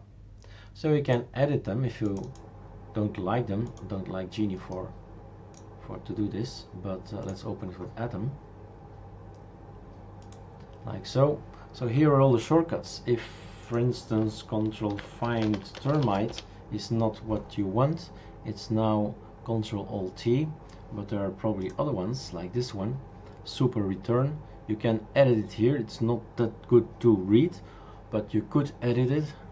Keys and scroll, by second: 14.9 ctrl+f, 15.0-16.5 typing.